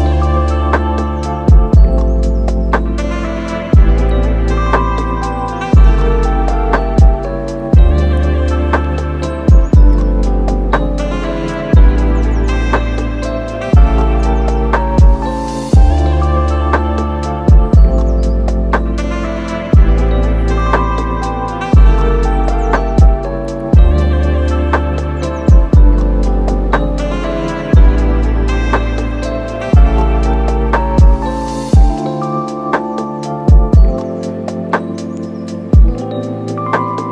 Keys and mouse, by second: 0.2 middle click, 0.6 shift+middle click, 1.9 click, 2.4 click, 2.5 click, 10.9 click, 11.0 click, 14.7 click, 15.1 middle click, 15.6 super+s, 15.7 middle click, 16.5 click, 22.3 click, 22.7 click, 24.0 click, 24.2 click, 26.4 middle click, 26.7 super+s, 26.8 middle click, 27.4 click, 27.5 middle click, 28.3 middle click, 29.1 super+s, 29.6 middle click, 30.1 shift+middle click, 30.2 middle click, 30.5 super+s, 30.6 middle click, 30.9 middle click, 31.1 middle click, 31.5 super+s, 31.5 click, 31.7 shift+click, 36.8 middle click.